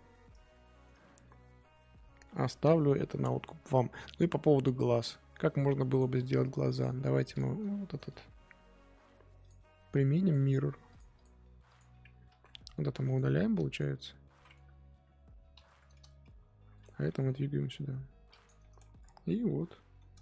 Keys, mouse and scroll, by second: 0.6-2.3 shift+middle drag, 2.3-2.6 scroll down 3, 2.6-3.5 middle drag, 3.5 scroll up 2, 3.8-8.1 middle drag, 8.1-8.9 scroll up 2, 10.2 click, 10.8 click, 11.7 click, 12.1 Tab, 15.3 Tab, 15.5 a, 16.5 shift+d, 17.0 g, 18.6 middle click, 18.9 Tab, 19.2-20.2 middle drag.